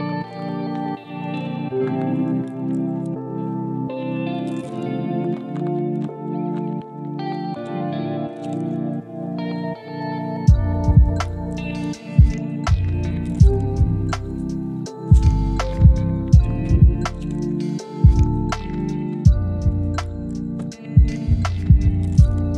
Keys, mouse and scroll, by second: 2.3 right click, 3.0 click, 3.7 right click, 4.2 scroll up 1, 4.4 right click, 4.9 scroll down 1, 5.2 right click, 5.4 scroll down 1, 5.6-6.0 scroll up 1, 6.0 right click, 6.4 scroll down 1, 6.6 right click, 6.9-7.3 scroll up 1, 7.3 right click, 7.9 click, 12.1 right click, 12.6-14.2 drag, 15.4 scroll down 1, 15.7-16.0 scroll up 1, 16.0 click, 16.2 right click, 16.5 click, 20.5 right click, 21.0 click.